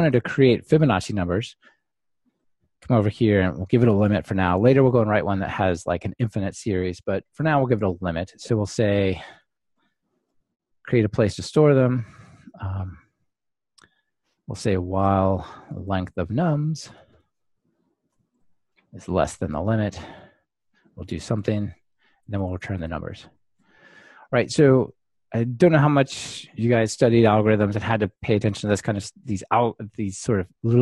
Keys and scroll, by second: 20.0 Return, 25.3 alt+super+l.